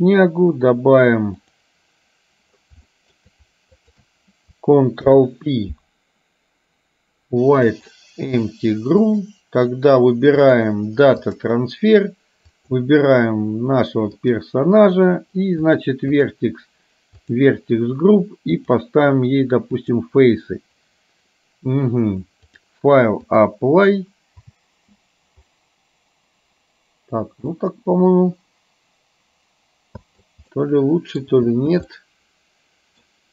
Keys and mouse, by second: 1.5 click, 3.1 shift+middle click, 3.8 shift+click, 5.1 ctrl+p, 10.6-11.6 drag, 12.7 click, 15.7 click, 16.2 click, 17.3 click, 18.7-20.1 drag, 22.6-23.6 drag, 24.7 space, 27.7-30.5 middle drag, 30.6 middle click, 31.6 space, 32.1-33.1 middle drag.